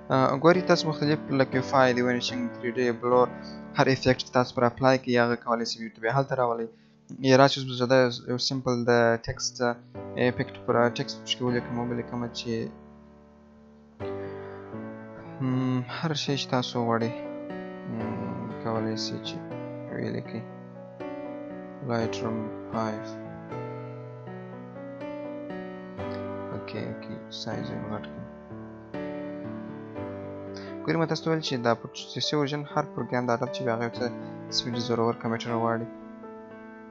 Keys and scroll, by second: 17.9 BackSpace.